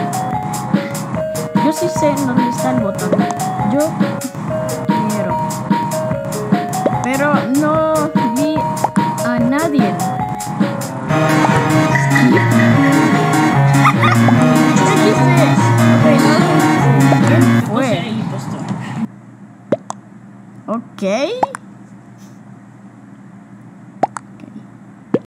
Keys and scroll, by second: 17.8 space.